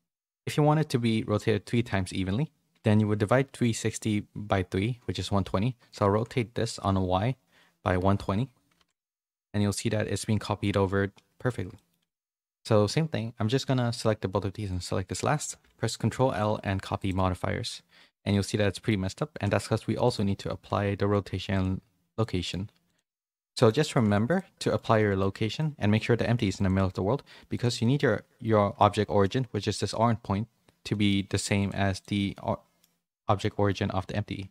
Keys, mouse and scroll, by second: 10.3 middle click, 10.5 middle click, 11.7 middle click, 11.9 scroll down 1, 14.7 shift+click, 16.1 ctrl+l, 18.2 middle click, 19.3 ctrl+a, 22.2 middle click, 23.4 shift+middle click, 24.0 a, 24.6 middle click, 24.9 shift+middle click, 25.5 middle click, 26.6 click, 27.5 click, 27.8 middle click, 28.7 middle click, 30.9 middle click, 31.6 click, 32.3 middle click, 33.0 click, 33.4 middle click.